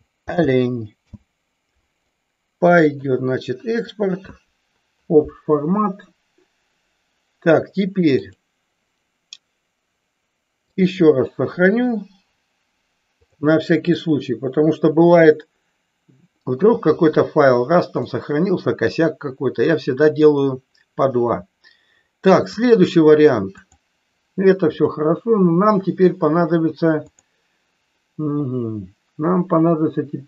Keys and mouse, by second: 8.1-11.0 drag, 18.0 middle click, 19.9-20.2 middle drag, 22.6-25.0 drag.